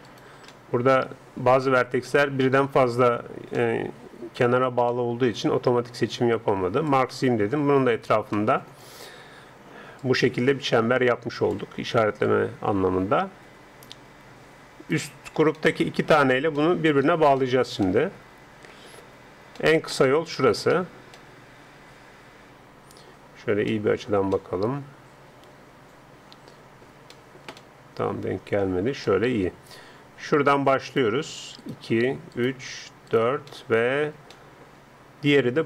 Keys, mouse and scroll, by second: 0.7-2.1 right drag, 2.1-6.5 middle drag, 6.9-8.7 drag, 8.3 middle click, 8.7-10.1 middle drag, 9.7 d, 10.1-11.9 drag, 11.6 d, 12.2 d, 12.3-14.9 right drag, 14.9 d, 15.2-23.1 middle drag, 15.2 d, 23.7-26.2 middle drag, 27.1 middle click, 27.8 middle click, 28.0 middle click, 28.3-30.8 middle drag, 30.9-33.9 right drag, 33.9-35.1 middle drag.